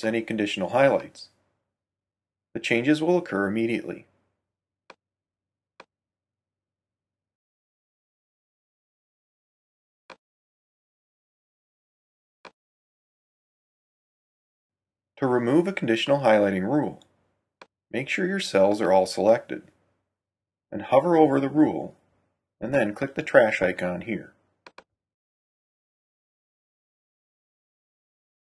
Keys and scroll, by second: 0.8 2, 1.2 Return, 5.7 5, 6.0 Return.